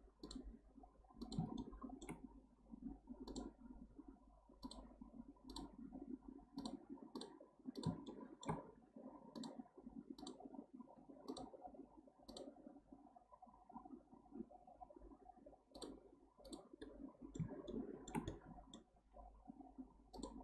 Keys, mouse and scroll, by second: 1.6-4.6 shift+middle drag, 8.1-11.1 shift+middle drag, 16.8-20.4 middle drag.